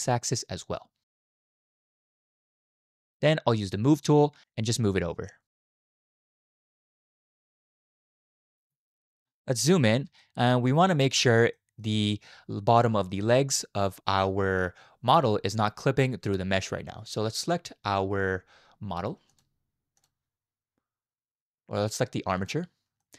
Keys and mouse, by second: 0.9 click, 2.5 click, 3.7 click, 5.2 click, 5.5-8.7 drag, 10.2-10.7 shift+drag, 11.6 shift+drag, 19.3 click, 19.9 click, 23.0 shift+drag.